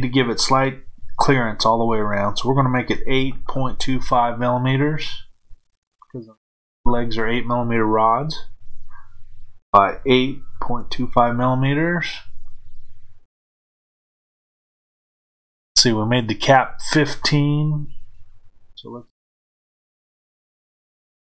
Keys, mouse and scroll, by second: 10.7 KP_2, 19.1-20.5 drag.